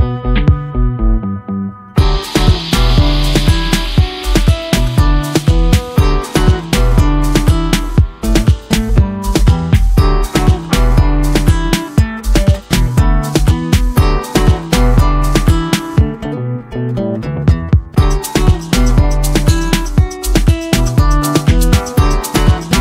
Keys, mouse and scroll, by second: 6.1 click, 6.1-8.3 drag, 15.0 click, 15.7 ctrl+shift+f, 16.5 click, 19.7 space, 19.8 right click, 20.2 click, 21.6 ctrl+space.